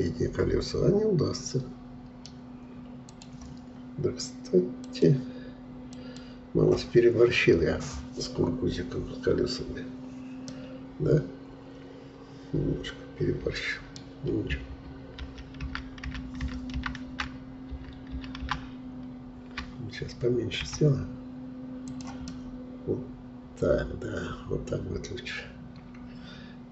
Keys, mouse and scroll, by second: 3.1 click, 10.5-13.5 middle drag, 15.2 ctrl+z, 15.6 ctrl+z, 16.4 ctrl+z, 16.7 ctrl+z, 17.1 ctrl+z, 17.7 ctrl+z, 18.4 ctrl+z, 20.7 s, 22.3-25.3 middle drag.